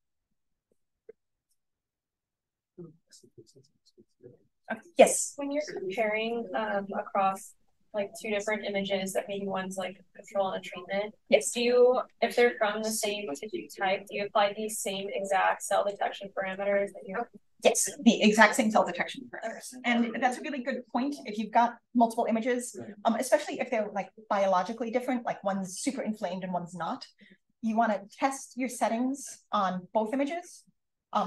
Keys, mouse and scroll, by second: 2.3 click, 2.9 click, 30.4-31.2 scroll down 1.